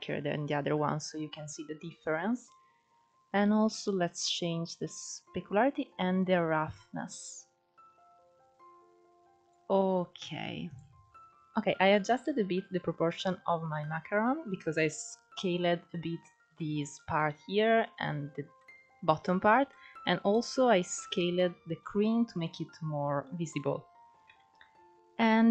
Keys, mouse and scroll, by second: 2.8-8.7 drag, 9.0-9.9 scroll down 4, 9.9 click, 10.3-11.0 scroll down 2, 11.0 shift+middle click, 11.3 scroll up 1, 11.4-11.9 scroll down 2, 12.8-14.2 scroll up 1, 17.5-18.0 scroll up 3, 18.0 middle click, 18.5-19.1 scroll up 6, 19.1-23.6 middle drag, 23.6 KP_0, 24.5-25.5 scroll down 5.